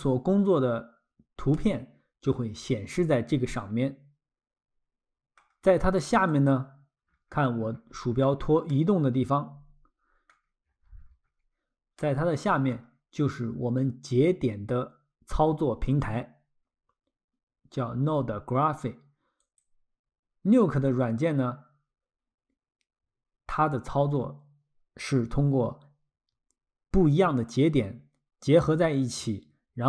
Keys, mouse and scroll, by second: 1.6 middle click, 6.3 click, 7.1-7.6 scroll, 8.7 middle click, 10.4-11.2 scroll, 12.0 middle click, 19.4 click.